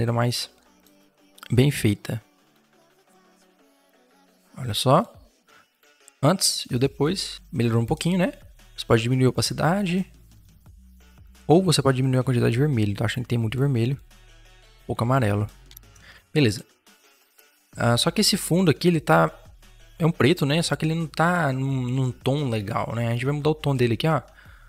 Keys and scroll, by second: 7.2 ctrl+-, 7.8 ctrl+0, 15.5 Return, 15.9 ctrl+0.